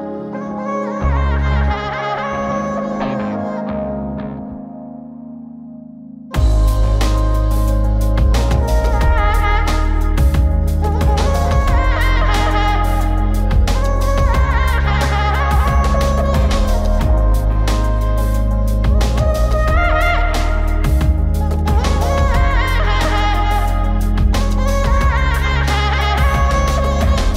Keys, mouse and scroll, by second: 3.3 click, 3.9 shift+click, 4.5 scroll down 3, 4.8 middle click, 5.8 g, 11.7 click, 13.3 middle click, 14.7 click, 15.4 middle click, 15.9-16.5 scroll up 2, 16.5 click, 17.4-19.5 drag, 19.8 middle click, 20.5-20.8 scroll up 1, 21.1 ctrl+space, 21.9-22.3 scroll down 2, 22.1 middle click, 22.7-23.3 drag, 23.9-24.7 drag, 24.8 scroll down 1, 25.1 middle click, 25.9-26.4 drag.